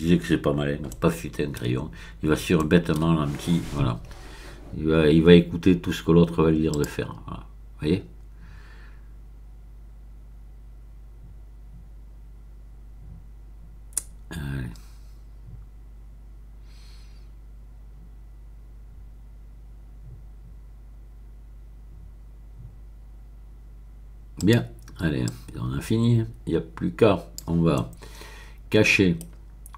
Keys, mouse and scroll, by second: 0.9-2.0 shift+middle drag, 2.6 shift+middle click, 6.7 click, 24.3 click, 24.7 middle click, 25.2-27.7 drag, 27.7-29.7 middle drag.